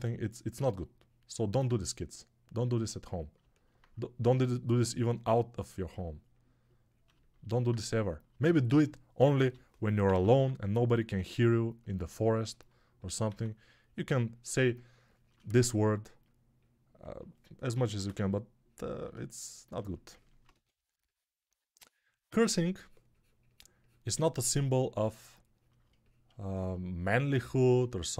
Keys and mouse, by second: 9.3 g, 9.9 ], 10.1 ], 10.2 ], 13.2 x, 17.7 1, 20.4 2.